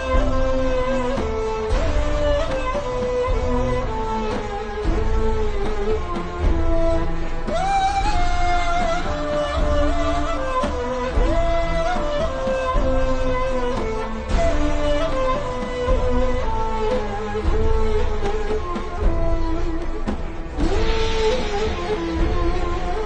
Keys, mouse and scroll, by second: 0.0 click, 2.2 i, 3.0 click, 4.9 v, 5.1 click, 6.4 i, 6.5 click, 6.8 v, 6.9 click, 7.1 alt+shift+scroll down 1, 7.7-8.2 scroll down 1, 8.2 click, 12.5-12.8 scroll down 2, 12.8 scroll up 1, 13.0 click, 16.2-16.7 scroll down 1, 16.7 click, 18.3 ctrl+scroll up 2, 18.6 click.